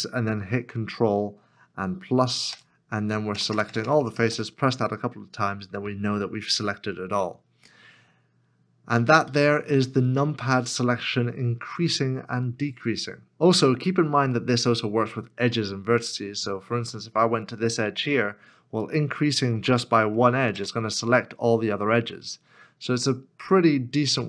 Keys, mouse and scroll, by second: 1.6 Tab, 2.5 ctrl+KP_Add, 3.3 ctrl+KP_Add, 3.5 ctrl+KP_Add, 3.6 ctrl+KP_Add, 3.8 ctrl+KP_Add, 4.0 ctrl+KP_Add, 4.1 ctrl+KP_Add, 4.3 ctrl+KP_Add, 6.7 middle click, 7.9-8.6 scroll down 1, 9.3-9.7 scroll down 1, 9.7 middle click, 10.7-11.3 scroll down 1, 13.4 shift+middle click, 15.2 shift+middle click, 15.9-17.9 scroll up 1, 20.5 ctrl+KP_Add.